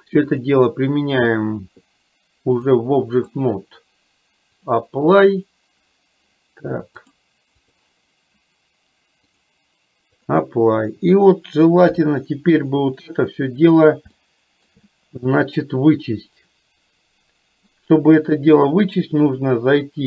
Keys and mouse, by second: 0.3-1.7 drag, 2.6 click, 4.7-6.0 drag, 7.2 click, 9.5 click, 11.8 KP_3, 14.3 middle click, 15.6 click, 18.6-20.0 drag.